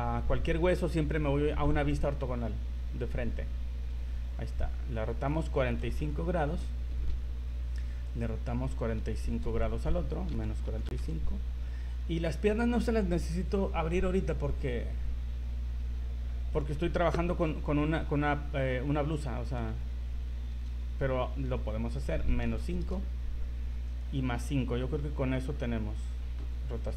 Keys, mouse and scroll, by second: 4.2 r, 8.2 right click, 9.3 r, 12.5 right click, 20.5 r, 24.0 right click, 26.5 r.